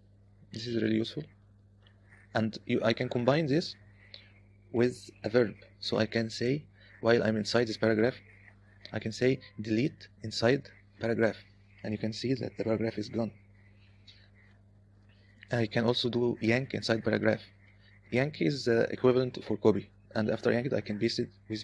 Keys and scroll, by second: 0.0-2.4 typing, 7.4 typing, 10.1 d, 10.6 i, 11.1 p, 14.3 u, 15.1 j, 15.3 j, 16.6-19.2 typing, 21.3 p.